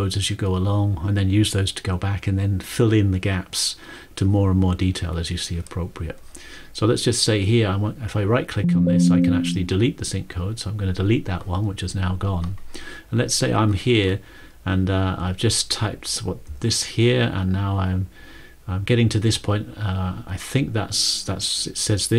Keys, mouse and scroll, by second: 8.2 click, 10.4 click, 16.9 click, 17.7 click, 20.2 click, 21.4 click.